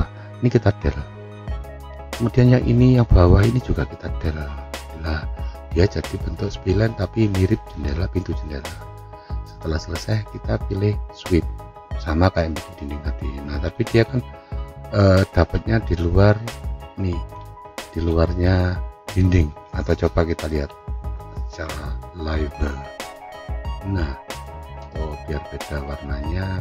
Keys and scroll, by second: 1.5 Delete, 5.9 Delete, 20.6 F3.